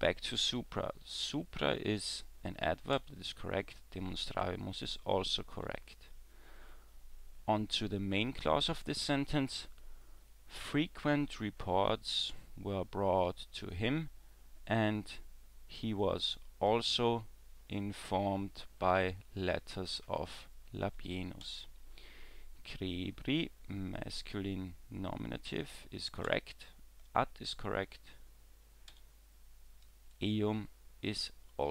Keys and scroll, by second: 3.0 w, 5.7 w, 21.4 w, 26.3 w, 28.9 w.